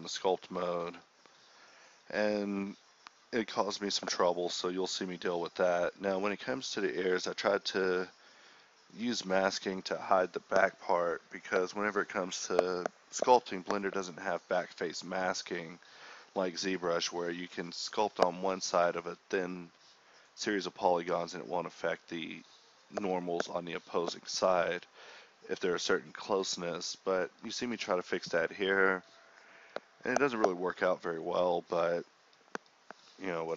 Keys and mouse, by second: 2.3 m, 4.3 drag, 5.9-9.6 middle drag, 9.6 [, 10.9-11.8 middle drag, 13.1 [, 13.2 ], 13.4 ], 14.9-15.4 drag, 15.4-15.9 middle drag, 15.9 ], 16.1 ], 16.9 click, 17.5 ], 17.8 [, 20.9 ], 24.3 ctrl+z, 24.5 [, 28.1-28.5 middle drag, 28.5 KP_1, 30.0 g.